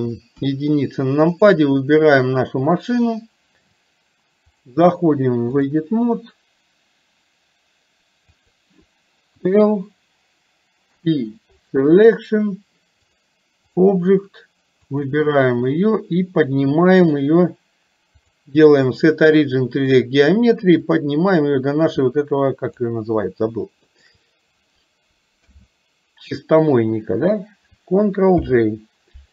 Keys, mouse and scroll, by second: 0.5 KP_1, 1.5 click, 2.7 click, 4.6-6.1 drag, 13.2 click, 15.1 click, 18.2-20.1 drag, 21.1-22.8 drag, 23.8 shift+click, 28.6 ctrl+j.